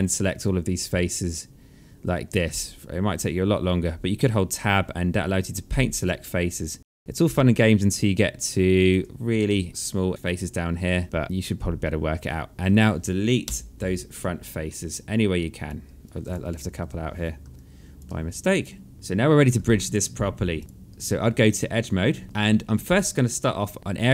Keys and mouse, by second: 5.5 Tab, 6.7 click, 8.4 Tab, 9.0 alt+middle click, 10.5 Tab, 13.0 Delete, 13.8 alt+click, 14.2 alt+middle click, 14.9 alt+click, 16.4 Delete, 17.1 alt+click, 18.5 Delete, 18.9 click, 19.2 alt+click, 20.6 alt+middle click, 22.0 alt+middle click, 22.5 alt+middle click, 23.1 alt+click.